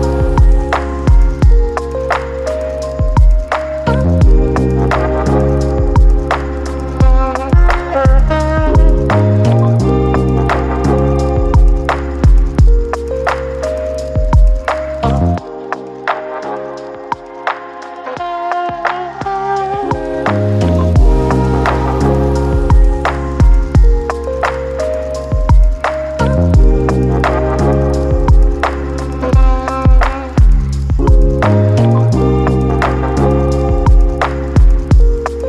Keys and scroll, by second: 3.8-5.6 typing, 8.8-10.4 typing, 16.2-17.9 typing, 20.6-22.3 typing, 27.2-29.4 typing, 31.6 ctrl+d.